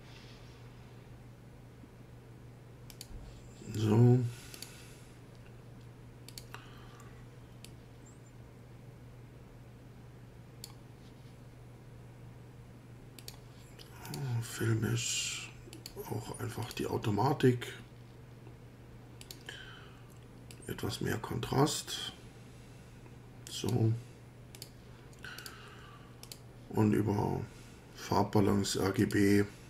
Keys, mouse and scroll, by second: 2.9 click, 4.6 click, 6.3 click, 7.7-10.9 drag, 13.2 click, 14.1 click, 15.7 click, 16.6 click, 19.2 click, 20.5-24.0 drag, 24.6 click, 25.4 click, 26.2 click, 29.0 click.